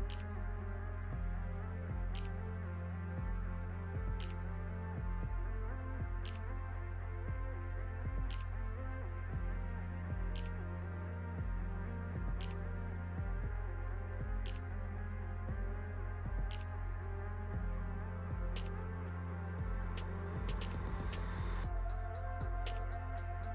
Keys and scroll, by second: 0.0-0.9 typing, 1.1 ctrl+d, 2.5 2, 2.6 Return, 5.4 shift+s, 6.7 ctrl+d, 7.4-11.0 typing, 11.2 ctrl+d, 11.9 ctrl+z, 12.3 Return, 13.4 Return, 13.6-18.1 typing, 19.7-23.5 typing.